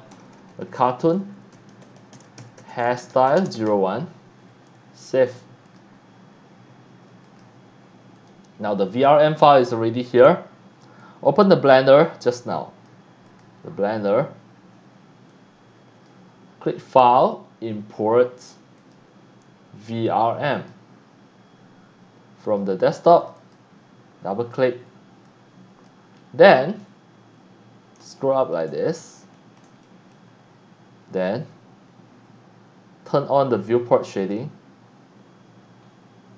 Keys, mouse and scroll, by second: 0.0-3.9 typing, 5.3 click, 5.7 click, 7.2 click, 8.2 click, 8.9 click, 11.0-12.9 drag, 13.2 click, 15.3 click, 17.2 click, 18.8 click, 20.5 click, 22.4 click, 23.2 click, 23.4 click, 25.2-26.0 drag, 26.2 scroll up 1, 26.9 scroll down 1, 27.3 scroll up 1, 28.2 shift+middle click, 28.8 scroll up 1, 29.3 shift+middle click, 29.8 middle drag, 34.2 click, 35.9-36.3 scroll up 2.